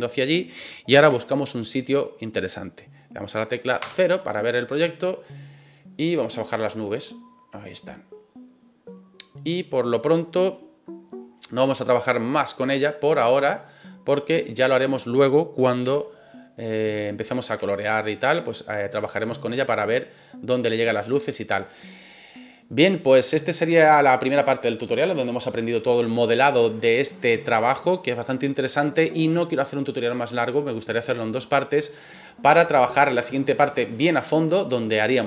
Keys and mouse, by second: 1.1 g, 1.9 click, 3.8 KP_0, 6.2-7.6 drag, 8.9-9.9 drag, 13.2 right click, 15.8 g, 16.7 click, 17.2 right click, 17.5 g, 18.3 click, 19.8-20.9 drag, 21.3 click, 22.6 click.